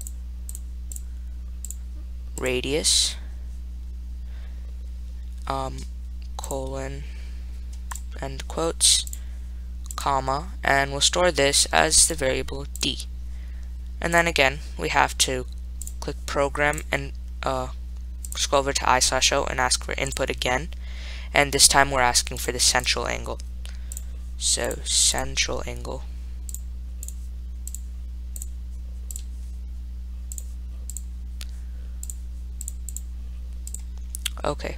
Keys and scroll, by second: 1.9 5, 6.7 ., 10.2 ,, 14.4 Return, 17.0 Down, 18.6 Right, 20.4 1, 25.5-26.2 typing, 27.3 4, 28.0 *, 29.4 ), 30.6 0, 33.1 ).